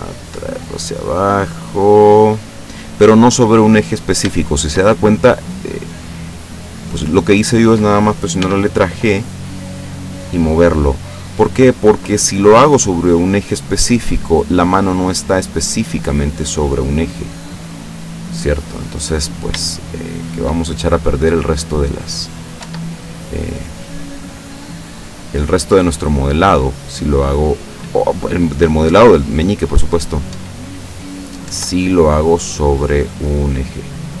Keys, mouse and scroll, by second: 2.6 click, 3.1 middle click, 4.3 shift+middle click, 5.3 middle click, 7.0 right click, 8.5 g, 10.4 click, 10.8-13.9 middle drag, 13.9 middle click, 15.0-18.3 middle drag, 18.3-18.8 scroll up 1, 19.7-20.5 shift+middle drag, 20.5-21.4 shift+scroll up 3, 21.4-22.7 middle drag, 22.7 Tab, 22.7-23.7 scroll down 3, 23.8-25.1 middle drag, 29.6 Tab, 29.6 middle click, 30.4 Tab, 30.9 scroll up 1, 31.5 Tab, 32.7 right click, 33.1-34.2 middle drag.